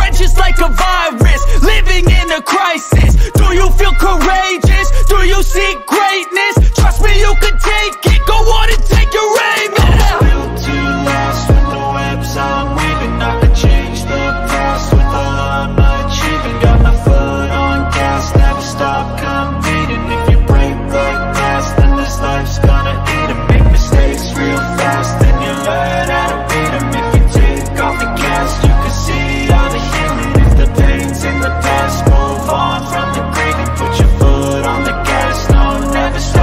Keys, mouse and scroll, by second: 4.0 click, 4.8 click, 5.2 BackSpace, 6.2 click, 7.0 click, 7.4 click, 7.7 BackSpace, 10.0 click, 10.9 click, 11.6 BackSpace, 12.5 click, 13.7 click, 14.8 click, 16.4 click, 18.3 click, 19.3 ctrl+b, 19.9 click, 20.6 click, 22.4 click, 23.2 click, 24.2 click, 25.5 ctrl+b, 26.1 click, 26.7 click, 27.4 click, 29.1 click, 30.2 click, 30.7 ctrl+b, 30.9 click, 31.5-31.9 drag, 33.2-35.9 drag.